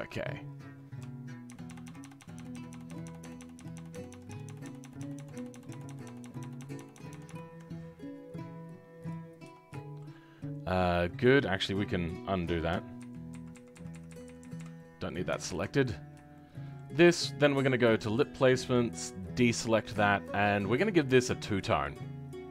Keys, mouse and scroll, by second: 0.1-1.4 scroll down 1, 1.4-3.9 ctrl+KP_Add, 4.1 ctrl+KP_Add, 4.2 ctrl+KP_Add, 9.0 click, 9.3-9.7 scroll up 2, 9.7 shift+middle click, 10.1-12.9 scroll up 3, 12.9-14.2 ctrl+z, 15.4 ctrl+shift+z, 15.9-16.3 scroll down 2, 16.3-17.8 shift+middle drag, 17.8-19.6 drag, 19.6-19.9 scroll down 2, 19.9-21.9 shift+middle drag, 21.9-22.5 drag.